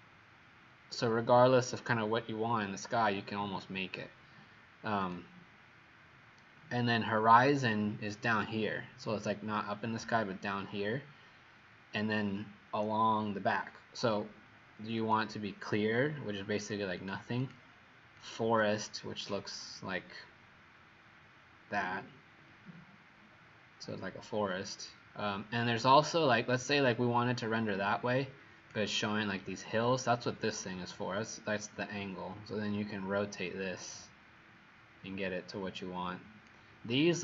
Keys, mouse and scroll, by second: 17.0 click, 17.4 click, 18.2 click.